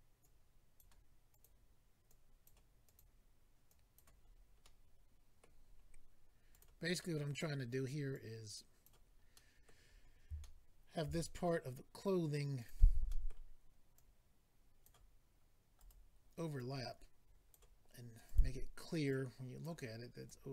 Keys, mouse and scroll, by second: 0.2 click, 1.3 click, 1.4 click, 2.1 click, 2.6 click, 3.0 click, 3.7 click, 4.2 click, 4.3-5.0 scroll down 3, 4.6 middle click, 5.6-6.5 scroll up 2, 6.5 click, 7.0 middle click, 8.1 click, 9.3 middle click, 9.9-10.4 scroll up 1, 10.4 shift+middle click, 11.0 middle click, 11.1-12.2 scroll up 2, 12.7 click, 13.1 middle click, 13.9 click, 15.8 right click, 16.6 click, 18.2 click, 19.1 click, 20.2 click.